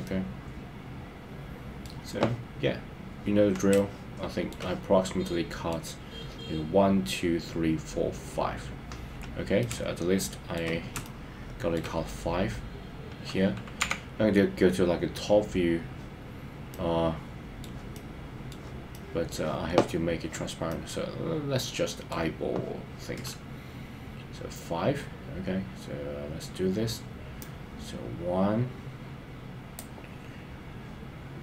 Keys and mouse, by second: 0.0-1.9 middle drag, 3.7 shift+middle click, 5.2 middle click, 9.6-10.6 shift+middle drag, 11.0 shift+middle click, 13.9 KP_7, 16.7-17.7 middle drag, 17.9 middle click, 18.9 middle click, 20.7-22.1 middle drag, 27.4-31.4 drag.